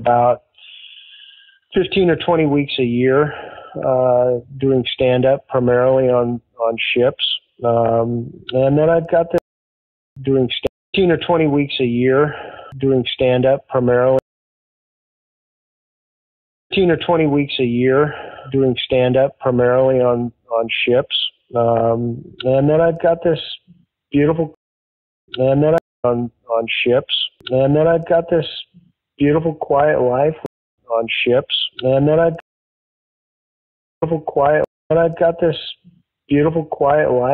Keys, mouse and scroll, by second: 7.8-9.3 drag, 9.3 space, 9.9 ctrl+shift+Delete, 10.1 space, 10.6 space, 10.8 click, 10.8 space, 13.6 click, 14.1 space, 14.9 click, 16.5 click, 16.6 space, 19.5 ctrl+s, 23.0-24.4 drag, 24.5 space, 25.0 ctrl+shift+Delete, 25.2 space, 25.7 space, 25.8 click, 25.9 space, 28.6 click, 29.6 click, 30.3 space, 30.6 click, 30.6 space, 32.3 space, 32.7 ctrl+z, 33.1 ctrl+z, 33.8 click, 33.9 space, 34.6 space, 34.7 click, 35.7 ctrl+s.